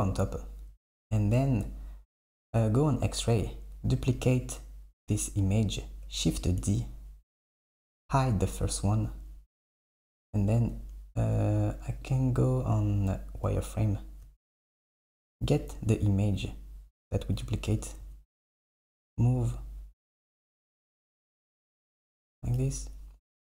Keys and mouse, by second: 2.9-4.1 drag, 6.3 shift+d, 8.8 click, 9.6 click, 12.1-12.7 drag, 14.5 click, 17.7 g, 22.6 g.